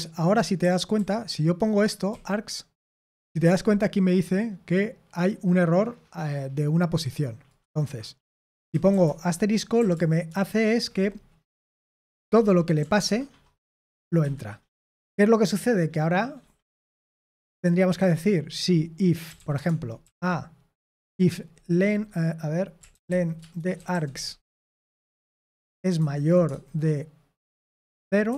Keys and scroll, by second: 0.3-2.0 typing, 8.7-9.7 typing, 13.4-14.2 typing, 16.6 o, 19.1-20.9 typing, 22.6-26.4 typing, 28.2 typing.